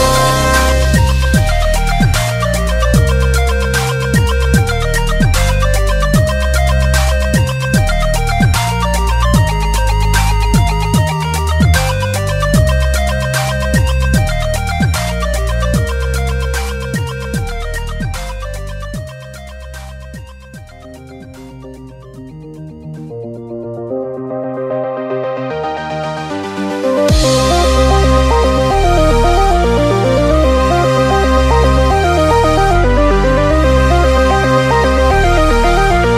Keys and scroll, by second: 2.4 super+z, 11.1-14.3 typing, 19.7 p, 27.6-28.3 typing.